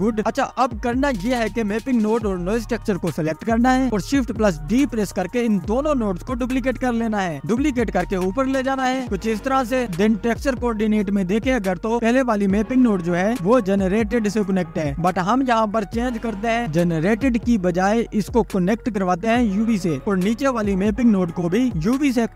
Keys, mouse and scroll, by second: 1.2 ctrl+s, 3.0 click, 3.2-3.7 scroll down 2, 3.7 click, 4.2 click, 5.0 scroll down 1, 5.2 middle click, 5.2 scroll up 1, 5.7 shift+d, 10.2 middle click, 10.2 click, 12.0-13.2 middle drag, 13.2 click, 13.7-14.5 scroll up 5, 16.9 drag, 20.3 scroll down 1, 20.5-22.3 middle drag.